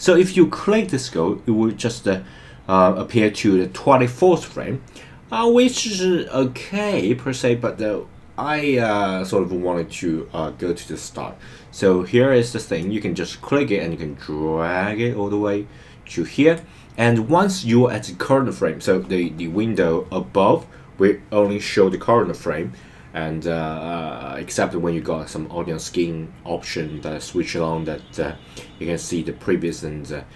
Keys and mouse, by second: 5.7 click, 12.8 click, 13.5 click.